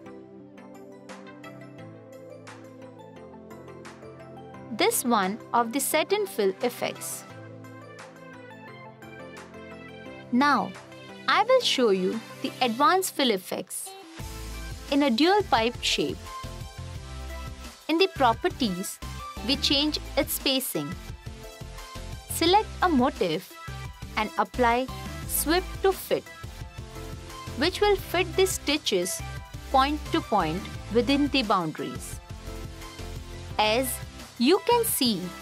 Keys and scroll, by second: 7.1 t, 8.1 t.